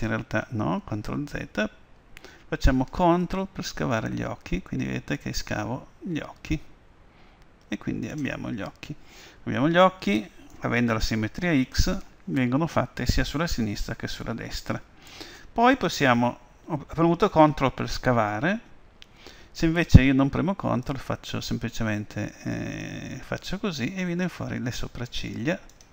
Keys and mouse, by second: 1.5 ctrl+z, 3.9-5.8 drag, 21.0-22.8 drag.